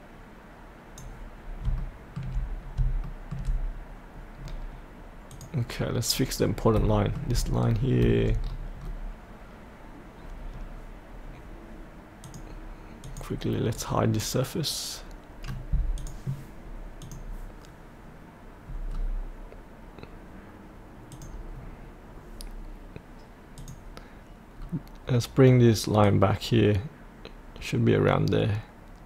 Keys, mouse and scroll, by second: 1.5 scroll up 1, 1.7 shift+middle click, 2.6 scroll up 1, 3.0 shift+middle click, 4.4-5.3 scroll down 1, 5.3 click, 6.1-6.5 scroll down 1, 6.5 scroll up 1, 6.9 shift+middle click, 7.6-8.0 scroll up 1, 8.4-12.2 scroll down 1, 12.2 click, 13.8 right click, 15.9 click, 18.9-21.1 scroll down 1, 21.1 click, 21.5-23.6 scroll up 1, 23.6 click, 24.6-26.0 scroll down 1, 26.0-28.0 drag.